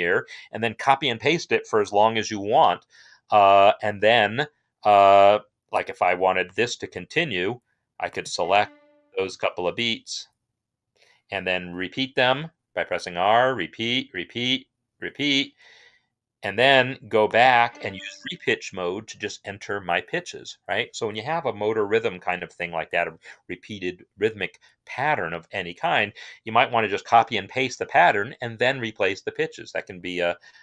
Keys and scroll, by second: 8.4 shift+Right, 8.7 shift+Right, 11.5 typing, 12.8-14.8 typing.